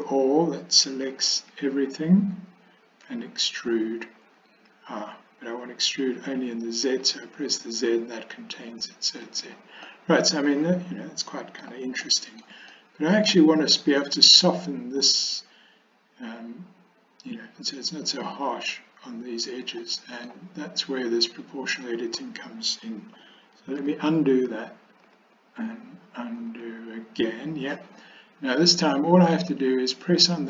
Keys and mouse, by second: 1.4 a, 3.1 e, 10.0 click, 10.2-11.7 middle drag, 12.2 shift+middle click, 12.9-13.4 middle drag, 20.0 middle click, 23.9 ctrl+z, 25.1 ctrl+z, 26.5 ctrl+z, 30.3 click.